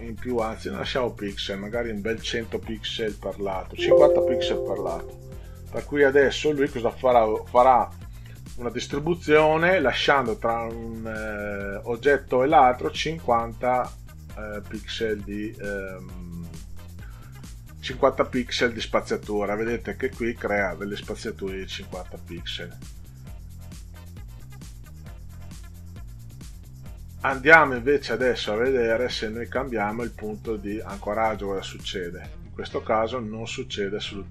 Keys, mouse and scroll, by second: 0.6 click, 1.4 click, 2.8 Delete, 4.5 5, 4.9 0, 5.9 click, 7.2 5, 7.6 0, 14.9 click, 29.2 click, 31.2 click, 33.0 click.